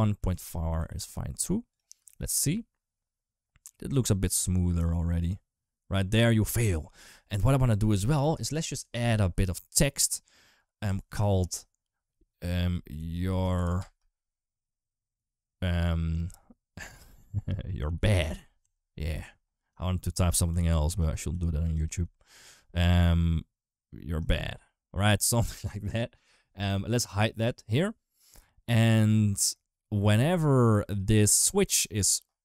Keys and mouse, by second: 0.7 ctrl+s, 1.5 click, 1.8 space, 6.4 space, 7.7 ctrl+s, 8.0 shift+a, 10.7 Tab, 11.1 ctrl+a, 12.5-13.6 typing, 17.7 shift+b, 17.8 shift+a, 18.1 shift+d, 18.4 Tab, 18.9 s, 20.3 g, 21.1 s, 21.7 g.